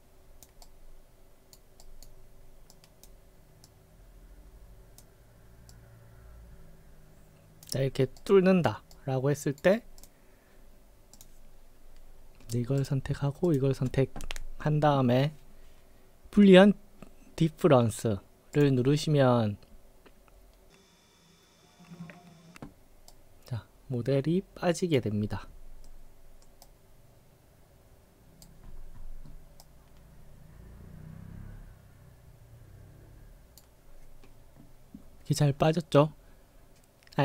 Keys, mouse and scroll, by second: 0.0-0.5 drag, 0.7-1.6 right drag, 1.9 right drag, 2.8-3.1 drag, 3.7-5.1 drag, 5.8-7.7 drag, 8.3 right click, 9.0-9.7 right drag, 10.0 click, 11.2 click, 13.5 shift+click, 18.6 click, 23.1-25.0 right drag, 25.2-25.6 scroll down 7, 25.9-26.3 middle drag, 26.7-28.5 right drag, 28.7-29.1 scroll up 6, 29.3 middle click, 29.7-33.6 right drag.